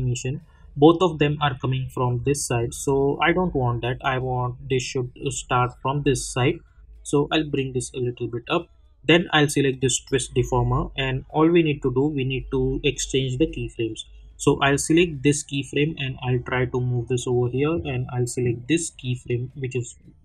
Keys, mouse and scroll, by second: 7.5 click, 7.7-9.7 drag, 14.8-20.2 drag.